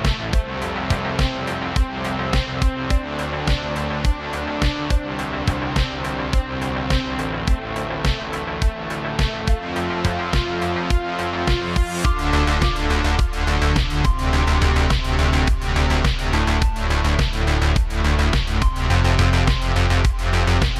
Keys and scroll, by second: 4.6 shift+space, 5.1 super+z, 5.2 super+z, 5.7 shift+space, 5.8 shift+space, 10.2 typing, 13.2-13.9 typing, 14.7 super+z, 17.4 space.